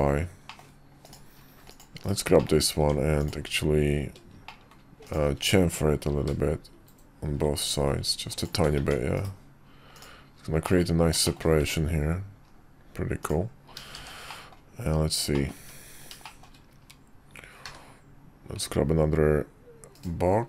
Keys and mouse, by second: 0.5 middle click, 1.0 click, 1.6 click, 2.0 /, 2.4 middle click, 2.8 Tab, 3.2-4.4 drag, 4.4 middle click, 5.0 shift+click, 6.1 ctrl+b, 8.8 Tab, 9.1 /, 10.6 middle click, 11.2 shift+middle click, 11.6 `, 12.5 KP_5, 13.2 middle click, 13.9 shift+2, 14.3 middle click, 15.3 middle click, 15.6 `, 16.2 shift+middle drag, 17.6 d.